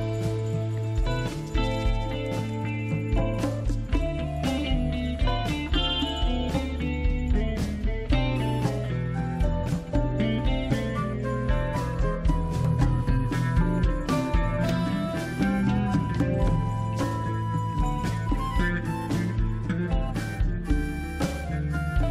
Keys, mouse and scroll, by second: 1.3 click, 5.8 click, 11.2 click, 16.6 click, 17.3-17.7 scroll up 1, 18.5-19.1 scroll down 1, 19.7 click.